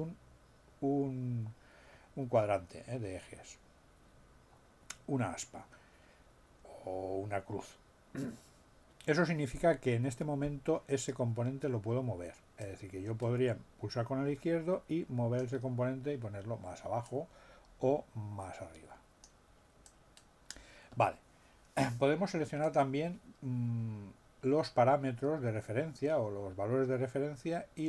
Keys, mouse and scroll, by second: 12.6-15.6 drag, 17.0-19.4 drag, 19.8-20.6 drag, 22.6 click.